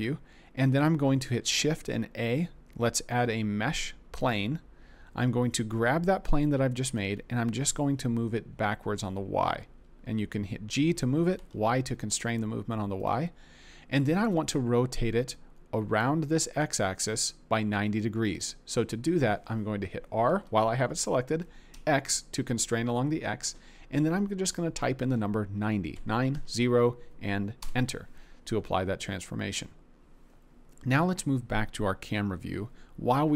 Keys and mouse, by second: 1.3 shift+a, 6.9 g, 11.3 y, 15.8-17.5 d, 18.3 click, 20.3 r, 21.7 x, 25.9 9, 26.3 0, 27.6 Return.